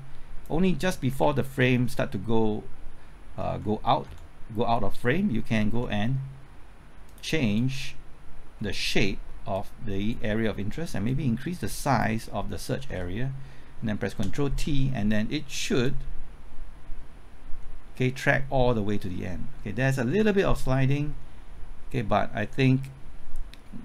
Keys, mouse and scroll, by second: 0.9 Left, 1.2-1.6 typing, 3.3 Left, 3.5-4.6 typing, 5.7 Right, 7.1-12.6 drag, 13.8 typing, 14.1 ctrl+t, 15.8-23.8 drag.